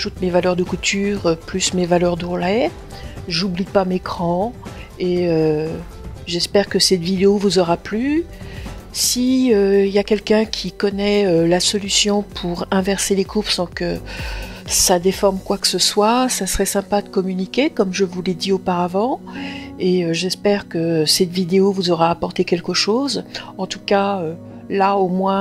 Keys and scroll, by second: 16.8 Return.